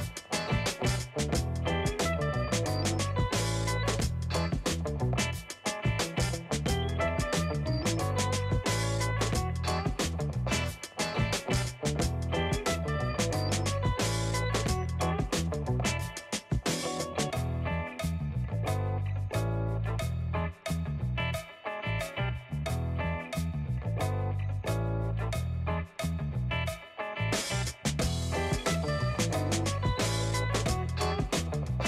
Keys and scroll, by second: 0.4 space, 1.9 space, 10.2 space, 13.7 space, 21.4-23.4 space, 23.7 space.